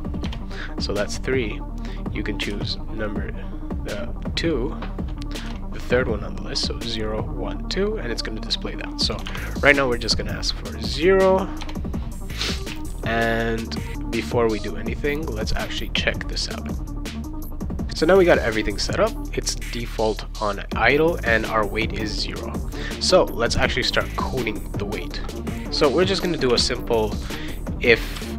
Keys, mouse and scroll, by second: 0.2 BackSpace, 1.9 click, 2.5 3, 5.3 BackSpace, 5.4 2, 9.1 BackSpace, 9.2 0, 10.6 click, 11.6 BackSpace, 12.6 ctrl+s, 12.9 click, 16.6 click, 22.7 click, 26.1-28.3 typing.